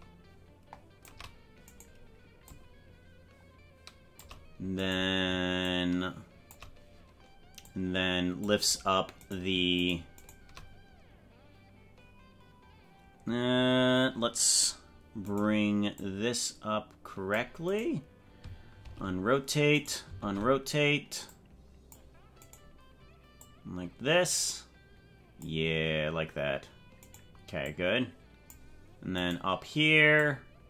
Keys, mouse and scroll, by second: 1.8 right click, 2.4-4.4 shift+drag, 4.9 right click, 5.6 shift+click, 7.7 click, 9.4 right click, 10.4 shift+right click, 15.4 right click, 16.0-17.4 drag, 17.8 right click, 18.8 alt+r, 19.9 right click, 20.2 alt+r, 21.3 click, 22.6 right click, 23.4-25.6 drag, 27.1 right click, 27.6 click, 29.3 right click, 30.2-30.6 drag.